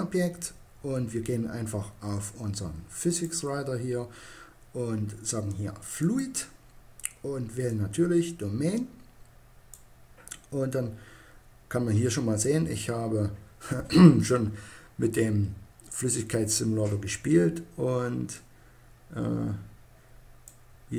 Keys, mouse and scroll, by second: 2.2-4.0 drag, 5.2-8.6 drag, 17.6-19.2 drag.